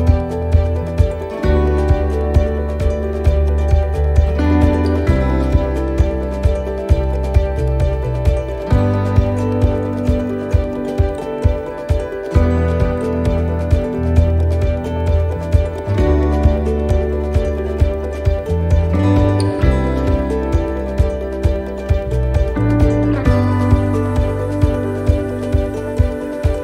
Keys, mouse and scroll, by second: 0.7 e, 2.5 click, 3.9 e, 5.4 click, 6.5 e, 8.2 middle click, 8.9 shift+middle click, 9.7 scroll up 1, 10.3 shift+middle click, 10.9 scroll up 2, 11.2 middle click, 12.5 click, 13.9 e, 15.5 click, 16.6 e, 18.1 click, 19.8 e, 21.2 click, 22.5 e, 24.0 click, 25.1 e.